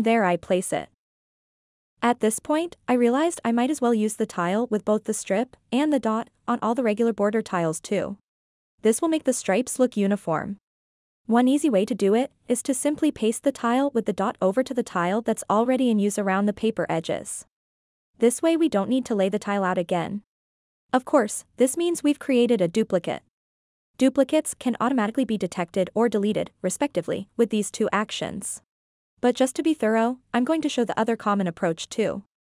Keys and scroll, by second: 14.4 ctrl+c, 15.2 ctrl+v.